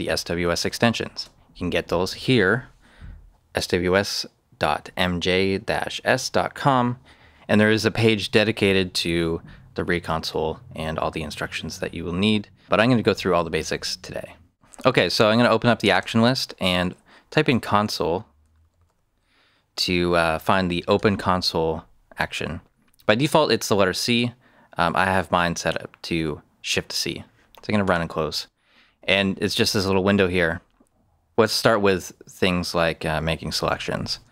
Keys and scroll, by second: 16.0 shift+/, 17.3-19.3 typing, 20.9 typing.